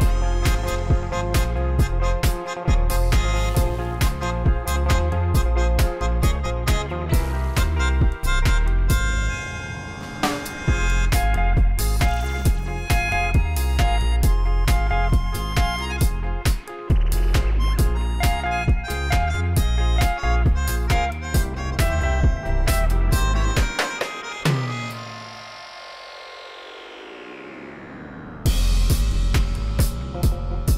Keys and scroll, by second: 0.0 ., 0.0 5, 0.3 Return, 0.7 Tab, 1.7-2.2 typing, 2.4 Return, 4.7 1, 4.8 Return, 5.8 7, 6.4 g, 7.5 g, 7.6 z, 15.7 1, 15.8 8, 15.9 ., 16.0 5, 16.1 Return, 18.3 alt+a, 29.2 shift+a.